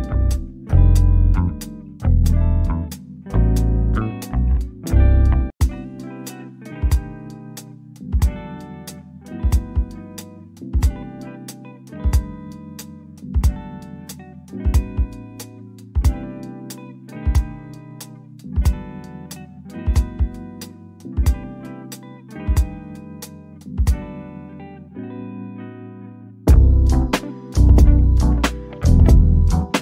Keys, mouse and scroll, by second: 0.0 click, 0.6 middle click, 1.2-2.0 scroll down 1, 2.0 Escape, 2.9 shift+click, 5.1 0, 6.9 scroll down 1, 7.1 middle click, 7.6-8.1 scroll down 1, 10.4 Escape, 11.7 shift+click, 13.2 click, 13.8 0, 16.0-16.6 scroll down 1, 17.0 o, 17.4-19.5 drag, 19.5 Escape, 21.4 shift+click, 22.6 click, 23.5 0, 26.1-27.3 drag, 27.3 middle click, 28.3-29.8 drag.